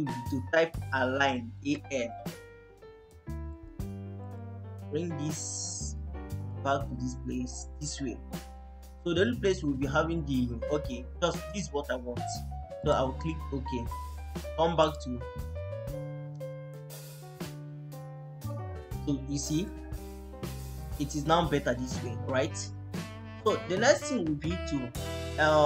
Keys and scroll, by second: 1.2-2.1 typing, 11.4 Escape.